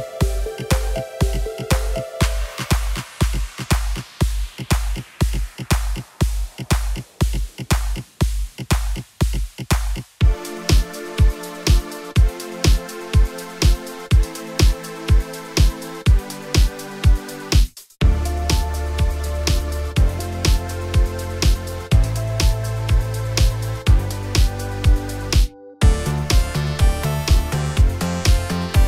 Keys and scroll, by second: 10.4 F11, 12.9 shift+z, 15.2 F11, 25.2 F11, 27.3 z.